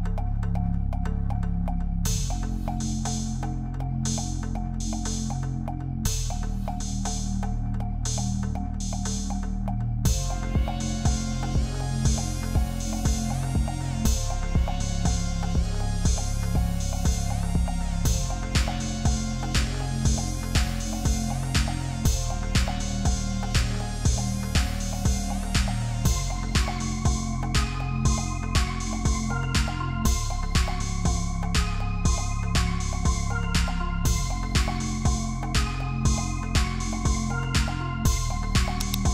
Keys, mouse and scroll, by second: 0.4 alt+click, 3.1 double click, 4.0 double click, 4.3-4.6 typing, 11.5 Return, 12.1 alt+scroll down 1, 13.1 double click, 13.9-15.0 typing, 15.7 Return, 16.3 BackSpace, 19.4 ctrl+t, 21.1 Return, 22.7 ctrl+click, 23.8 double click, 24.7 ctrl+d, 25.8 alt+click, 26.9 ctrl+z, 27.5 typing, 28.8-29.4 typing, 31.1 double click, 34.4-35.3 Up, 36.0-36.8 scroll up 10, 36.8 double click, 39.0 ctrl+click.